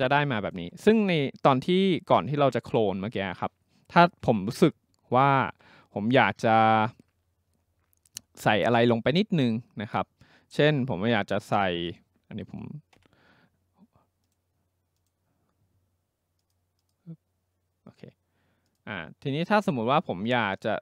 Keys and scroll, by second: 5.4 ctrl+z, 12.9 Delete.